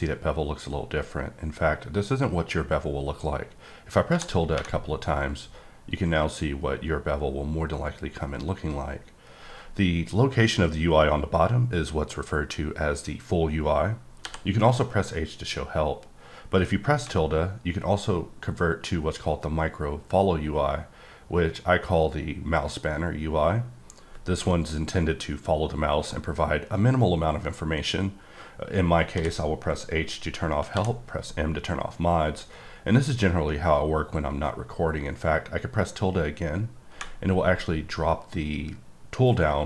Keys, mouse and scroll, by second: 4.1 `, 4.5 `, 14.2 h, 16.9 `, 29.1 h, 30.7 m.